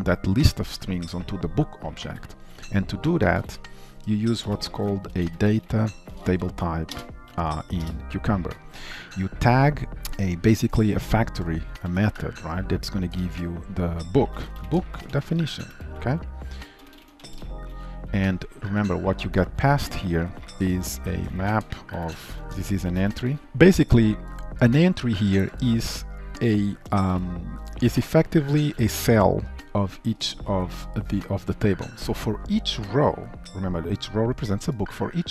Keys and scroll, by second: 7.1 Return, 12.2 Return.